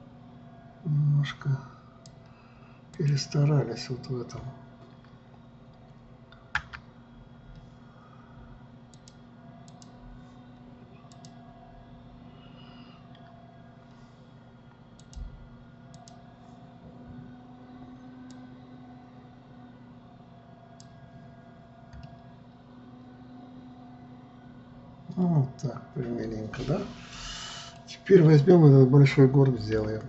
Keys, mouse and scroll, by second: 3.5-6.6 drag, 7.2 Tab, 9.5-11.8 drag, 15.5-18.6 drag, 18.9-21.9 drag, 22.6-25.8 middle drag.